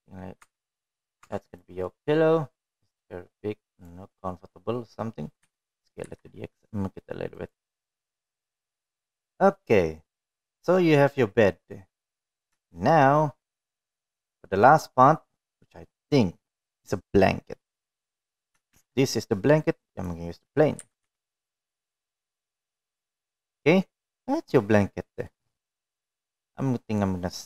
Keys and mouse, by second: 0.7-1.4 middle drag, 2.2 Tab, 2.6 middle click, 3.0 Tab, 3.6-4.8 middle drag, 5.5 click, 7.2 s, 9.6 click, 10.0-12.0 middle drag, 12.5-13.8 middle drag, 14.4 shift+middle drag, 15.2-16.0 middle drag, 20.6 shift+a, 22.6 g, 24.7-26.1 middle drag, 27.1 middle drag.